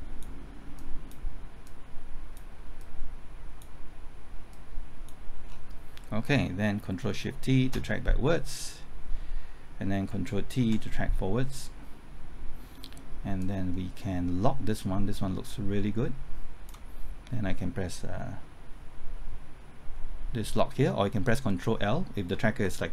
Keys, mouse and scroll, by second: 5.5-6.1 scroll down 1, 7.6 ctrl+shift+t, 10.6 ctrl+t, 13.4-17.4 drag.